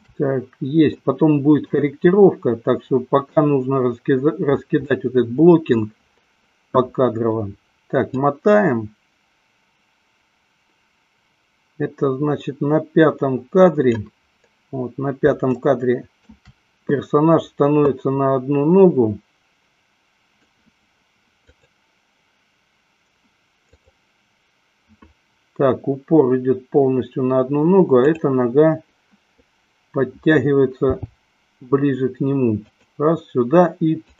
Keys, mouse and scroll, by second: 1.1 middle click, 5.0 middle click, 8.7 click, 15.7 shift+middle click, 21.8 click, 24.2 click, 28.1 click, 31.2 g.